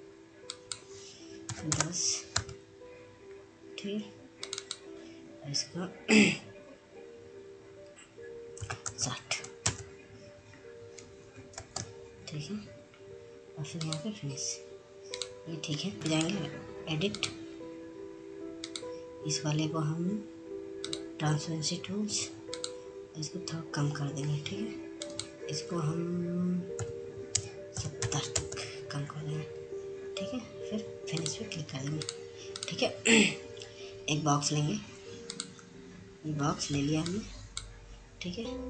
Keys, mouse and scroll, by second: 3.5 Tab, 5.5 click, 12.3 click, 12.4 ctrl+space, 14.5 click, 16.2 right click, 17.1 click, 20.7 click, 24.7-27.0 drag, 27.0 BackSpace, 30.8 click, 34.9 click, 36.3 F2, 36.7-38.6 drag.